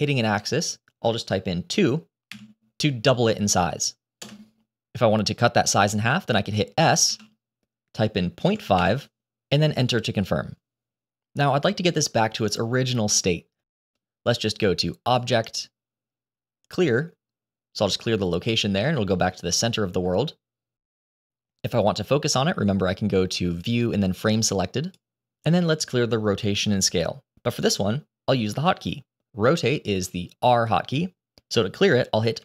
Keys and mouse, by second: 6.9 s, 15.1-18.7 drag, 19.7 shift+middle drag, 23.4-25.2 drag.